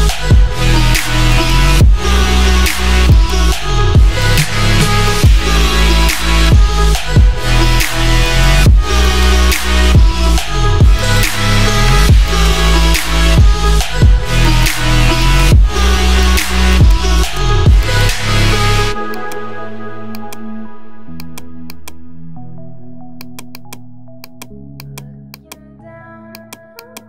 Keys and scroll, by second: 4.9 space, 6.5 [, 18.4 ].